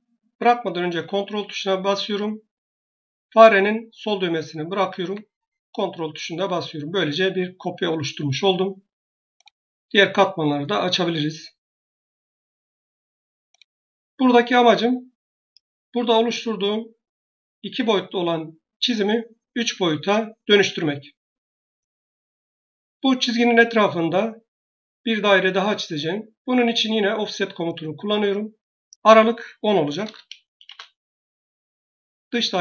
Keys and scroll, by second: 29.4-30.4 typing, 30.5 Return.